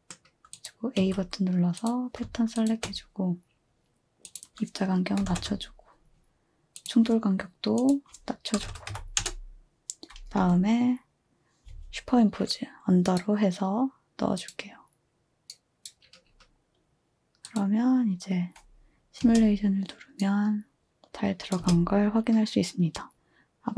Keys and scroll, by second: 1.0 a, 5.0-5.8 typing, 8.3-9.4 typing, 19.2 space, 21.6 space.